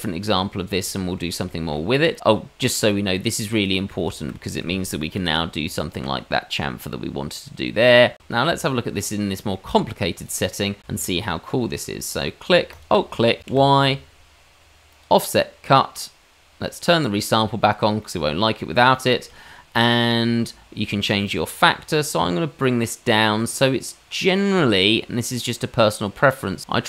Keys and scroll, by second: 5.3 ctrl+b, 8.7 Tab, 10.8 Tab, 13.4 y.